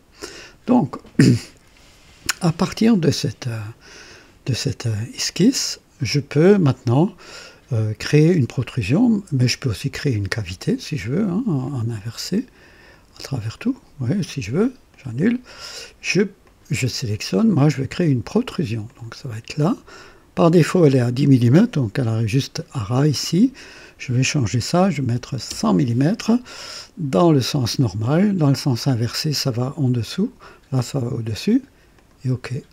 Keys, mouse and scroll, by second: 9.9 click, 11.6 click, 12.9 click, 13.4 click, 14.9 click, 16.4 click, 18.8 click, 24.7 KP_1, 24.9 KP_1, 25.1 KP_0, 25.5 KP_0, 28.5 click, 30.0 click, 31.9 click.